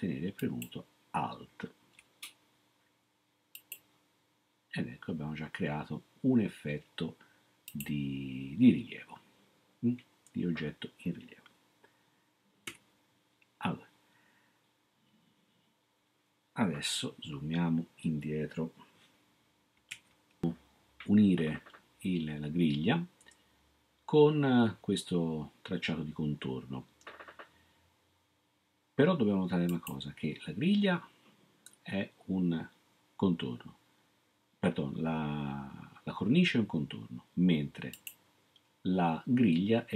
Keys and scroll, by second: 12.7 ↻.